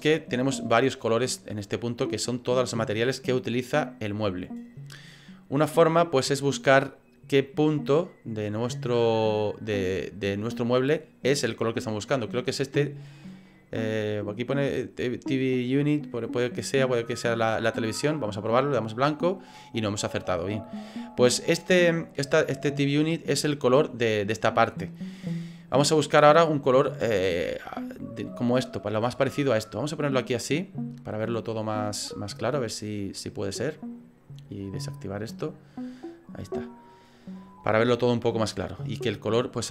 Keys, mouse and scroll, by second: 2.0 click, 12.3 click, 17.2 click, 34.6 click.